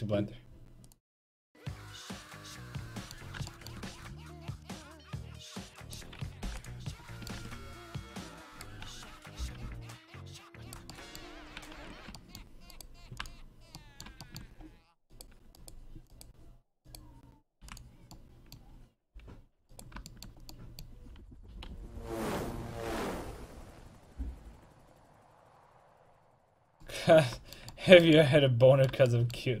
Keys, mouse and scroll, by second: 2.9 middle click, 4.1 c, 6.0-7.6 right drag, 6.4 p, 7.4 Tab, 9.6 g, 11.8 ctrl+Tab, 12.7 click, 13.1 w, 15.1-18.1 right drag, 17.6 w, 19.0 g, 21.5 z, 22.4-26.8 drag, 26.9 middle click, 27.9-28.9 middle drag.